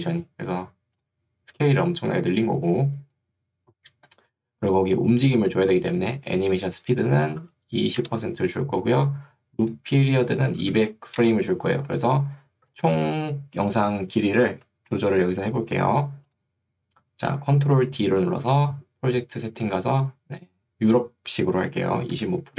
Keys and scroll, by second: 7.3 2, 8.1 Return, 10.5 2, 11.3 Return, 12.9 ctrl+2, 14.7 Escape, 18.5 ctrl+d, 22.3 5.